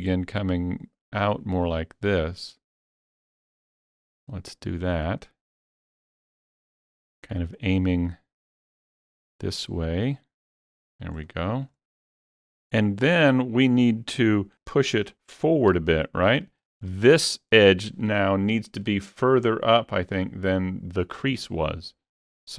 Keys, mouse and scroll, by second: 0.2-2.2 drag, 2.2-4.2 drag, 4.2-6.3 drag, 6.3-9.5 drag, 9.5-11.7 drag, 11.7 alt+click, 13.3-15.7 alt+drag, 13.3-14.3 scroll down 1, 15.7 KP_3, 16.6 shift+middle click.